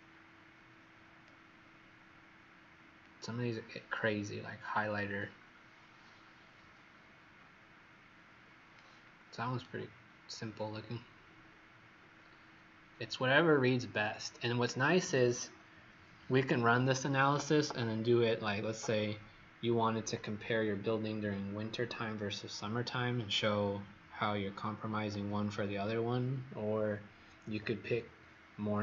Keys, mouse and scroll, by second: 9.5 right click.